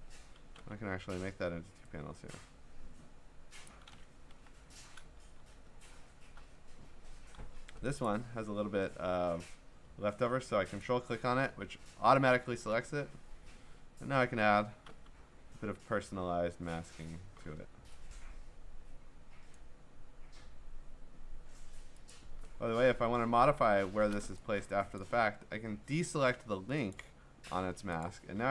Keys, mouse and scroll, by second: 0.5 m, 3.7 click, 4.4 Delete, 5.4 ctrl+d, 5.7-6.1 scroll, 7.4 v, 8.1 ctrl+click, 10.8 ctrl+click, 15.1 m, 19.5 click, 22.1 click, 22.8-23.5 scroll, 25.0 click, 26.9 click, 28.0 click, 28.2 v.